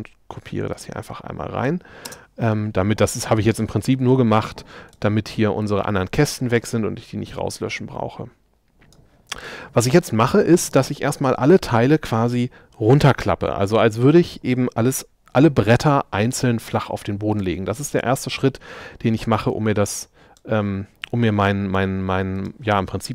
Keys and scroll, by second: 2.1 space.